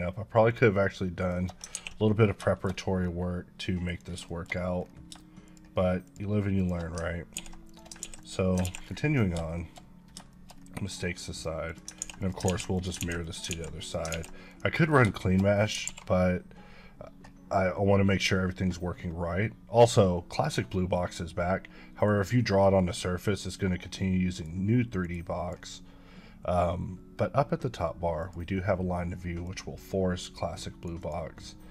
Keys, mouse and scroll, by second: 0.5 shift+click, 1.2 shift+click, 1.7 ctrl+x, 2.7-3.1 scroll up 5, 3.9 click, 4.3 shift+middle click, 4.5-5.0 scroll up 5, 5.4 shift+click, 6.1 shift+double click, 6.6 shift+click, 7.3 ctrl+x, 7.6 click, 8.0 ctrl+x, 8.2 click, 8.9-9.3 scroll down 6, 9.6 shift+middle click, 10.0 scroll down 1, 10.3 shift+middle click, 10.5-11.0 scroll up 5, 13.0 ctrl+x, 14.2 ctrl+x, 14.5 click, 14.8 scroll down 3, 15.2 shift+middle click, 15.6 scroll down 1, 15.8 alt+w, 19.0-19.6 scroll up 2, 19.6-21.7 scroll down 1.